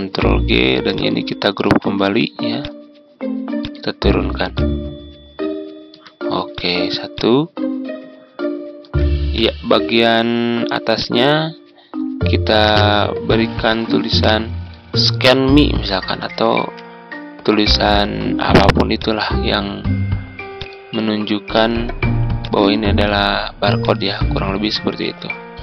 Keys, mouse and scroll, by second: 0.8 shift+click, 2.5-9.3 drag, 12.2 ctrl+d, 13.6-20.8 drag, 21.0-21.3 ctrl+scroll up 1, 22.3-23.6 drag.